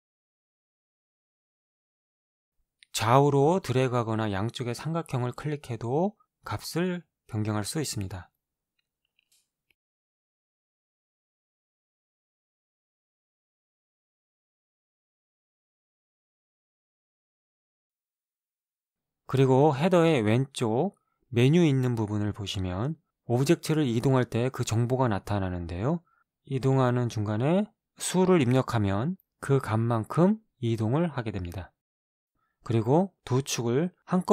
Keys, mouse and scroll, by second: 0.6 Return, 2.8-6.9 drag, 7.5 click, 10.5-12.7 drag, 12.7 click, 15.7-17.3 drag, 17.3 KP_0, 17.7 Return, 24.4-31.1 drag, 28.1 3, 29.6 Return.